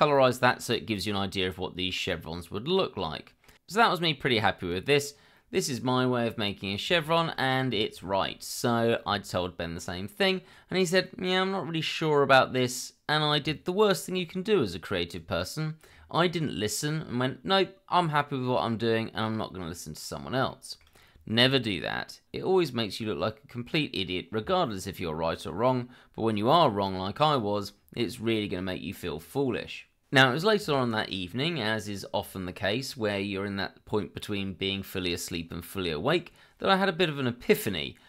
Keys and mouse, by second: 1.5-3.4 middle drag, 3.6 click, 3.9 shift+middle click, 4.2-6.6 middle drag, 8.2-9.2 middle drag, 9.4 shift+middle drag, 10.2 shift+middle click, 12.4-14.1 middle drag, 20.5 shift+middle drag.